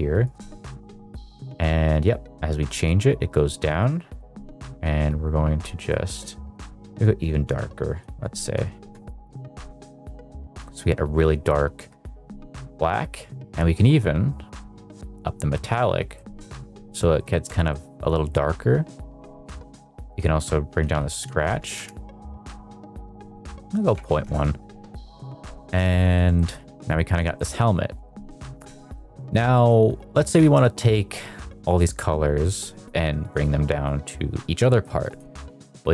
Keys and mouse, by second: 4.3 click, 5.8 drag, 7.2 click, 8.1-9.0 drag, 9.2 middle drag, 9.8 shift+middle click, 12.9-15.6 drag, 16.1 middle click, 16.4 shift+middle drag, 16.9 middle drag, 17.2 shift+middle click, 17.6 middle click, 18.1 middle click, 20.0-21.8 drag, 23.2-24.2 drag, 25.0 middle drag, 25.3 shift+middle drag, 25.7 middle drag, 26.1 shift+middle drag, 26.3 middle drag, 26.7 middle click, 27.3 shift+middle drag, 28.9-29.3 middle drag, 29.5 shift+middle drag, 30.5-31.6 shift+middle drag, 34.6 middle click.